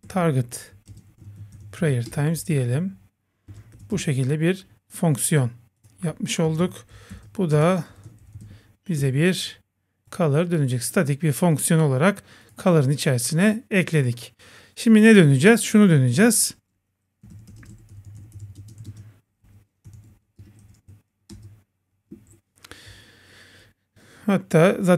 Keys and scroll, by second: 2.1 Return, 2.4 Right, 3.9 Return, 9.0 Return, 20.4 Return, 22.9 Left, 23.9 Left.